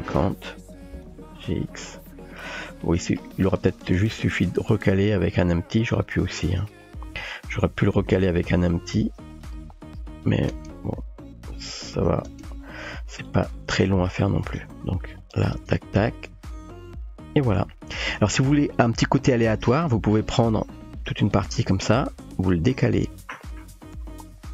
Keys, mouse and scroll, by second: 0.9 g, 2.7-3.6 drag, 3.9 g, 6.8-7.8 drag, 8.3 g, 10.1 click, 10.5 space, 12.3 space, 12.5-13.3 drag, 13.8 t, 15.2 click, 15.6 space, 18.1 space, 19.2 click, 19.8-21.3 drag, 21.9 g.